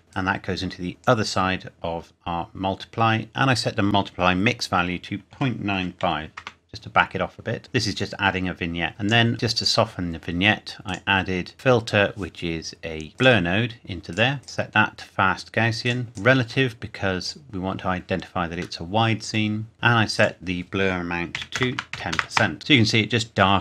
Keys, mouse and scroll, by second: 0.0 scroll up 1, 0.1 click, 3.8 click, 5.3 KP_Decimal, 5.7 KP_9, 6.0 KP_5, 6.4 KP_Enter, 7.6 middle click, 8.9 click, 13.1 click, 18.8 middle click, 19.5 scroll up 1, 20.1 click, 21.3 KP_1, 21.5 KP_0, 21.7 Tab, 21.9 KP_1, 22.1 KP_0, 22.3 KP_Enter.